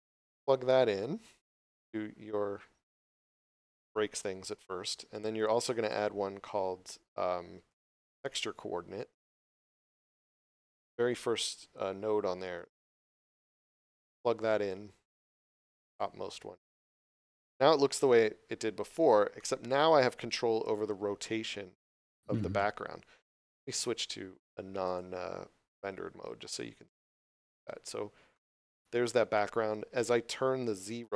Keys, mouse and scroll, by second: 5.1 click, 7.6 t, 9.9 click, 12.4 scroll up 1, 12.8 shift+middle click, 13.4 scroll up 1, 14.8 click, 24.8 click, 26.6 scroll down 1, 27.1 middle click.